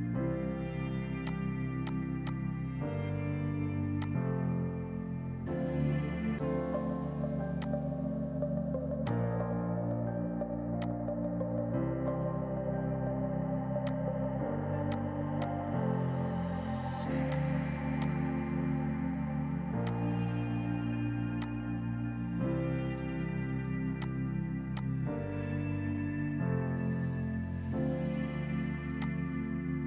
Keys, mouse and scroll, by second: 1.1 shift+click, 1.7 click, 2.1 F2, 2.2 click, 7.5 alt+click, 9.0 click, 9.8 F4, 10.6 F2, 10.7 click, 11.7 shift+Page_Down, 12.7 right click, 13.7 click, 17.5 F3, 17.9 click, 18.1 right click, 19.8 click, 21.7 2, 22.1 Return, 23.9 click, 24.7 ctrl+click, 27.0 ctrl+z, 27.3 space, 28.9 click.